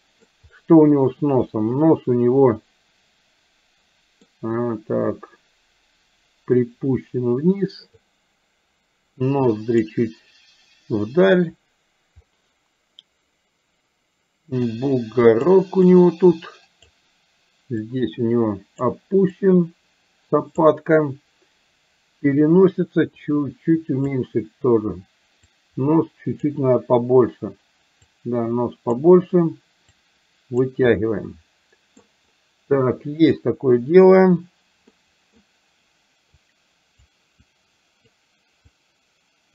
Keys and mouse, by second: 1.5-4.4 middle drag, 6.6-8.1 drag, 9.3 click, 14.6 click, 15.9-16.9 drag, 17.9-18.9 drag, 19.4-20.6 drag, 23.3 click, 25.5-26.5 drag, 28.1 click, 30.0 click, 31.0-32.1 middle drag, 35.0 middle click, 36.4 click, 37.5 click, 38.8-39.5 drag.